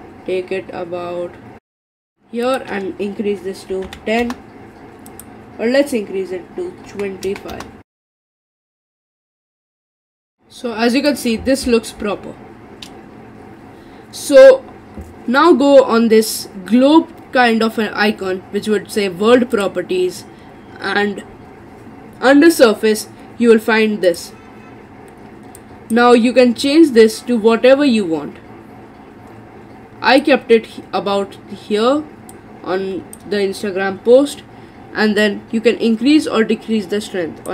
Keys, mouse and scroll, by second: 2.5-7.9 drag, 8.7 middle click, 8.9 click, 9.0 middle click, 9.5 middle click, 9.9 click, 10.0 middle click, 10.3 click, 10.4 middle click, 11.1 click, 19.6 click, 24.1 click, 35.2-37.5 drag.